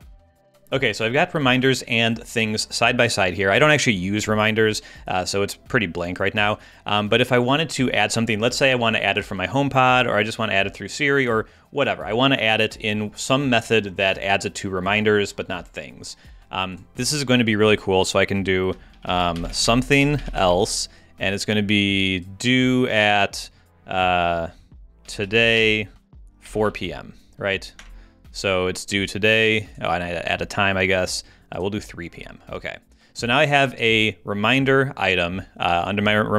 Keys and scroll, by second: 18.7-20.8 typing, 24.8-27.1 typing, 27.8 Return.